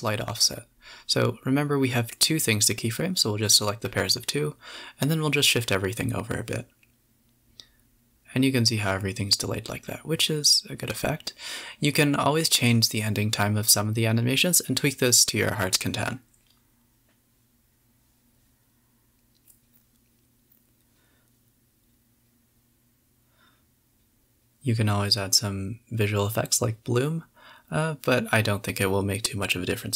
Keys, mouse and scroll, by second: 1.4 g, 4.0 Right, 5.2 KP_0, 5.6 a, 6.1 a, 6.2 space, 7.8 z, 8.2 scroll up 1, 9.5 space, 10.7 g, 13.0 space, 14.6 b, 15.2 g, 15.8 a, 16.1 scroll up 2, 16.4-16.8 scroll down 2, 19.8 scroll up 2, 22.9 click, 23.7 drag, 24.3-26.3 drag, 27.8 F12, 29.6 click.